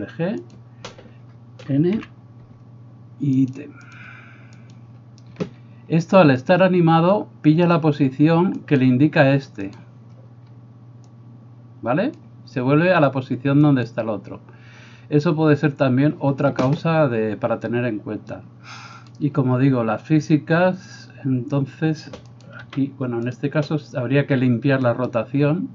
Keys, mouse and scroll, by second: 0.8-3.6 middle drag, 2.0 n, 3.6 click, 4.8-11.2 middle drag, 8.7 right click, 11.2-23.5 drag, 13.7 middle click, 13.7 right click, 19.1 middle click, 19.1 right click, 22.4-25.0 middle drag, 22.4 right click, 22.7 g, 25.0-25.7 right drag.